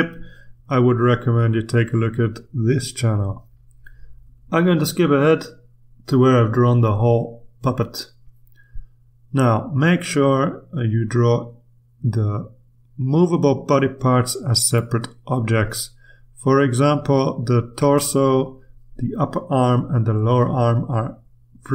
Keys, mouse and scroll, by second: 4.1 click, 7.6 click, 10.8 click, 13.5 click, 17.1 click, 19.1 click, 20.4 click.